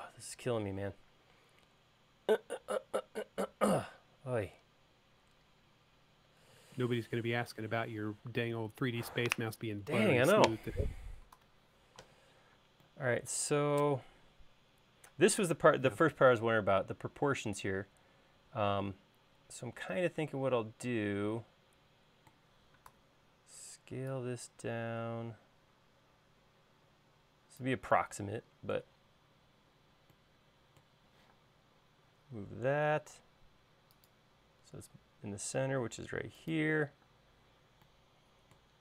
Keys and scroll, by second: 12.1 super+s, 23.7 s, 32.1 m, 38.0 space.